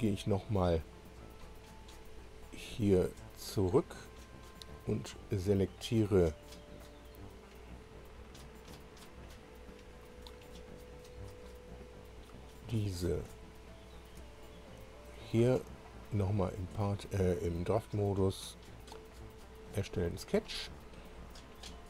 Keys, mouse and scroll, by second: 1.5-2.3 scroll up 3, 2.6-2.9 scroll down 2, 3.7 click, 9.1 scroll up 1, 12.1 click, 12.6 scroll down 1, 14.3 shift+click, 15.8 click, 17.9 click, 19.6 click.